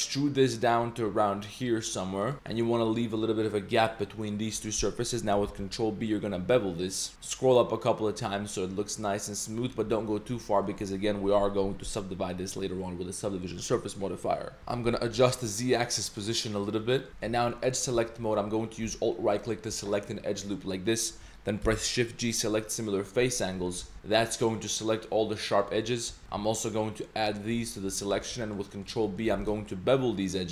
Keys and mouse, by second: 2.3 shift+middle click, 2.6 middle click, 5.5 ctrl+b, 14.6 ctrl+z, 14.9 g, 16.8 middle drag, 17.1 2, 17.2 middle click, 17.4 z, 17.6 middle click, 17.9 z, 19.3 alt+click, 20.8 middle click, 21.6 shift+g, 23.5 middle click, 23.8 z, 23.9 middle drag, 25.0-25.6 middle drag, 25.8 middle click, 26.6 alt+shift+z, 26.6 alt+shift+click, 27.2 alt+shift+click, 28.2-28.6 middle drag, 28.7 middle click, 29.0 middle click, 29.3 ctrl+b.